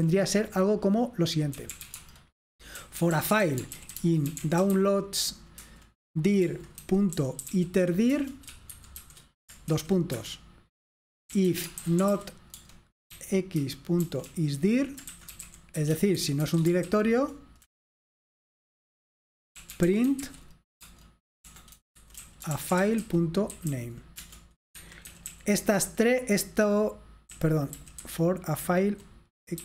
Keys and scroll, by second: 0.0 typing, 1.4-5.3 typing, 5.6 Return, 6.6-17.7 typing, 19.5-25.9 typing, 24.8 Escape, 27.3-29.6 typing.